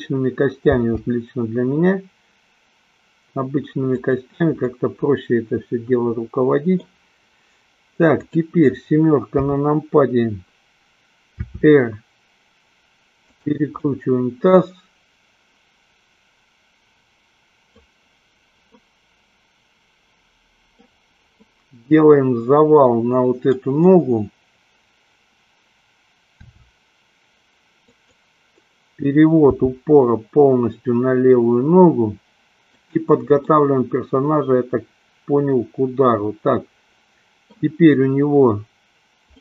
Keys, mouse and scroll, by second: 0.6 g, 4.3 drag, 4.8-7.1 middle drag, 9.6 KP_7, 11.3 r, 13.6 click, 14.0-18.1 middle drag, 19.0-21.1 middle drag, 21.5-23.6 middle drag, 26.3 r, 28.1 click, 29.6 g, 33.1 click, 33.6-37.9 middle drag.